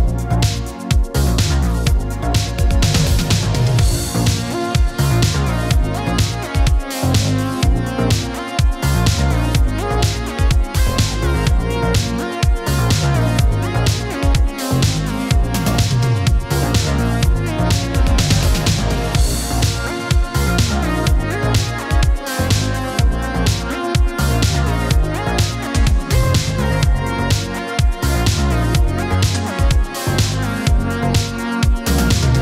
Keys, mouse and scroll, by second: 1.1-1.6 scroll down 1, 2.1 click, 2.5 ctrl+d, 3.6-5.9 shift+drag, 6.3 ctrl+d, 6.9-10.7 drag, 11.0-11.6 middle click, 11.8 ctrl+d, 12.6-13.3 shift+drag, 21.6 ctrl+d, 22.8-25.0 shift+drag, 26.4 ctrl+d, 27.4-30.0 drag, 31.6-32.1 middle click, 32.3-32.4 drag.